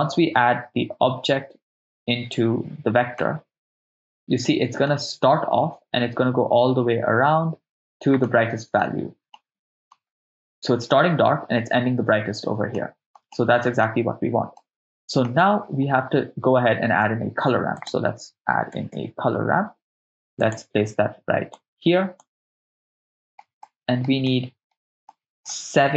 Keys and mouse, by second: 3.3-5.0 middle drag, 8.3-9.3 middle drag, 9.4-11.1 ctrl+middle drag, 12.8-13.2 ctrl+middle drag, 13.3-13.9 middle drag, 14.6 middle click, 17.6 shift+a, 21.5 click, 23.1 middle click, 24.5 middle click, 25.1 ctrl+middle click.